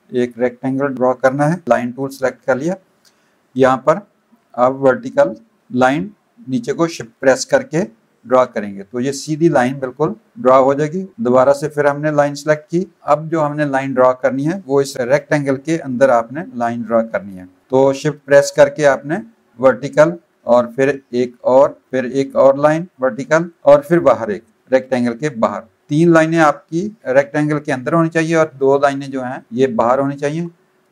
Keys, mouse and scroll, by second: 4.5 click, 11.8 click, 19.1 shift+click, 20.6 click, 21.9 shift+click, 23.9 click.